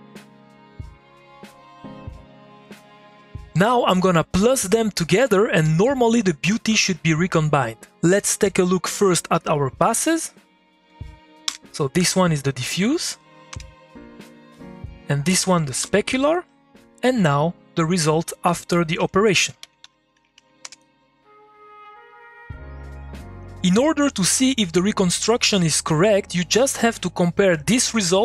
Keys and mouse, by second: 0.2 middle click, 0.4-1.6 drag, 1.6-2.8 ctrl+drag, 2.8 ctrl+click, 3.2 middle click, 10.5 click, 11.4 2, 13.1 click, 13.5 h, 14.7 click, 15.8 2, 17.9 click, 19.0 Tab, 19.2-20.5 typing, 20.6 Return, 22.1-28.2 ctrl+drag.